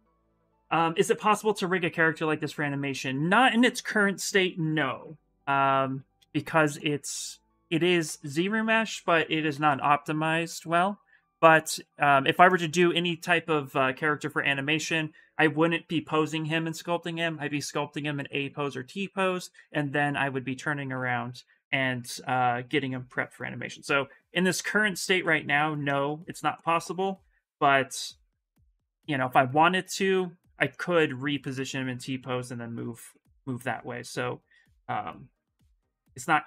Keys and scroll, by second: 5.0 shift+f, 7.6 shift+d, 7.8 shift+d, 8.1 shift+d, 9.3-10.9 typing, 22.3 s, 33.5 s, 35.1-36.0 typing.